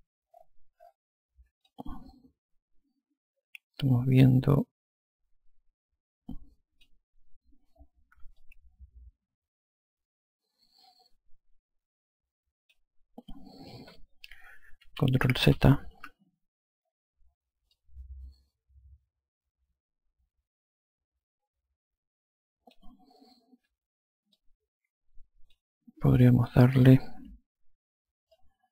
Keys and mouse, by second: 1.9 alt+click, 8.6 alt+click, 15.1 ctrl+z, 18.0 alt+click, 24.6 alt+click, 27.1 click, 28.6 click.